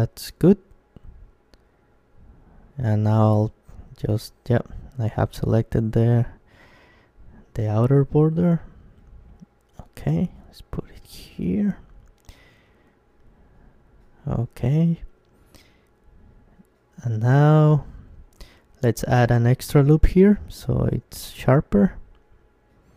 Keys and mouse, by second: 0.3 Tab, 3.2 KP_3, 4.8-6.8 middle drag, 6.5 g, 6.8 click, 13.7-15.4 drag, 14.8 Tab, 15.6 middle click, 16.5 Tab, 17.8 ctrl+r, 22.0-22.9 drag, 22.2 Tab.